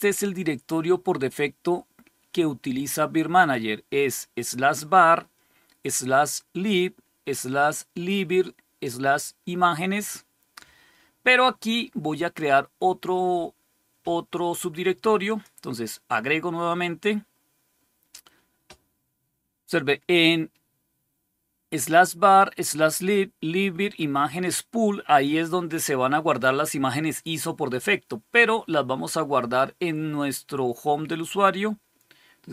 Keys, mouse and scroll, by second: 11.5 click, 15.1 click, 30.9 click.